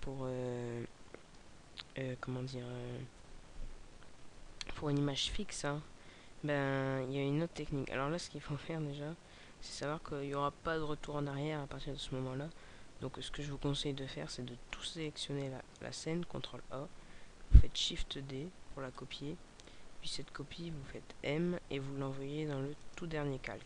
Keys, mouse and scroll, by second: 8.2-9.3 scroll down 4, 9.3 scroll up 3, 19.1 click.